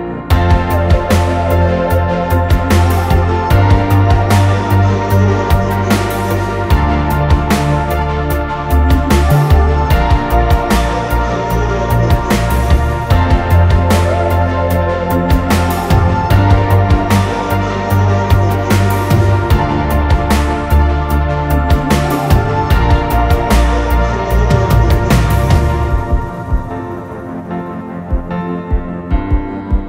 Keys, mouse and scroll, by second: 0.0-0.1 typing, 2.9 double click, 8.0-9.3 typing, 13.5-14.4 scroll down 1, 14.4 typing, 16.4 alt+click, 24.1 typing, 24.7 double click, 28.6-29.0 typing, 29.3 double click.